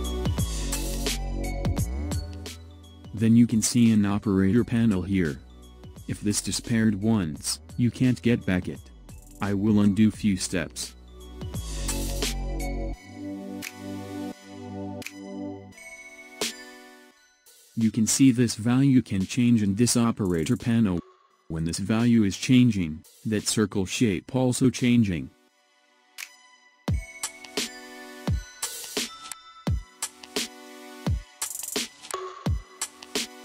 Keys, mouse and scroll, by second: 4.3-6.5 drag, 12.0 ctrl+z, 12.5 ctrl+z, 13.8 alt+shift+s, 19.2-22.1 drag, 30.0-33.0 drag.